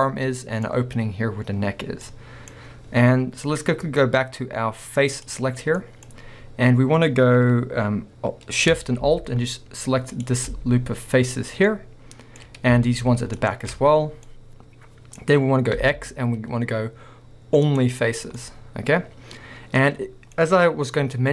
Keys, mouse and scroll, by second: 0.1 middle click, 2.6 scroll up 1, 5.3 click, 5.8 middle click, 6.3-10.1 scroll up 1, 10.1 alt+shift+click, 11.4 scroll down 2, 11.7-12.1 middle drag, 12.4 scroll up 1, 13.4 alt+shift+click, 14.3 middle click, 14.9-15.3 middle drag, 15.3 scroll up 1, 15.8 x, 18.2 scroll down 1, 18.4 middle click, 19.3-20.3 middle drag.